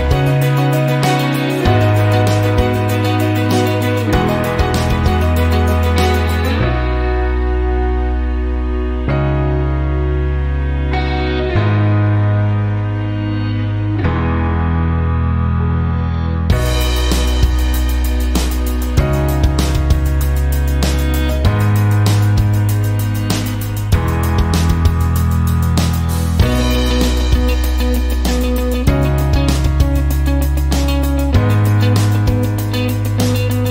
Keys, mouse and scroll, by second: 8.0 click, 16.5 click, 18.6 click, 19.9 Right, 20.3 BackSpace, 21.2 KP_5, 22.5 click, 23.1 click, 24.1 BackSpace, 24.6 KP_5, 27.2 click, 31.6 click.